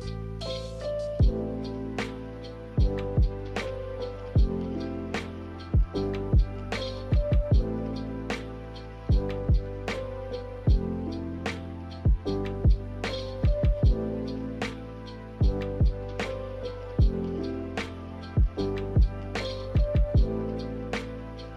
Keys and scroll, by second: 0.2 a, 2.2 m, 6.9 b, 8.0 a, 12.5 b, 14.0 m, 15.3 Escape.